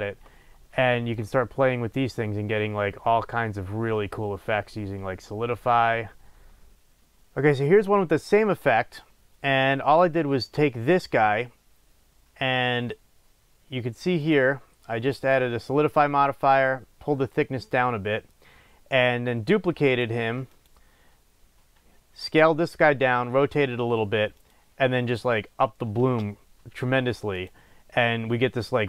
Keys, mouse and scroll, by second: 6.3 click, 14.1 click, 19.8 click, 20.4 click, 24.3 click, 27.3 click.